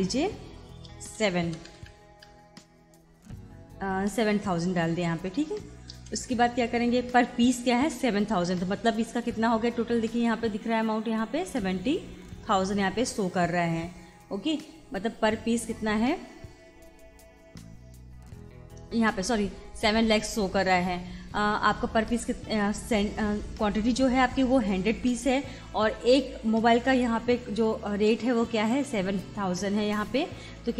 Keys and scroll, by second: 1.1 7, 1.5 0, 6.0 Return.